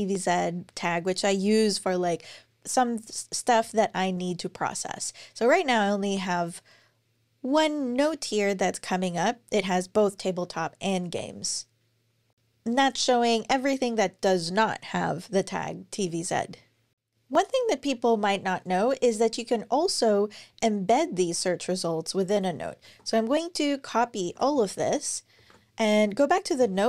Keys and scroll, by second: 22.7 super+a, 24.0 super+x, 25.2 ctrl+super+l.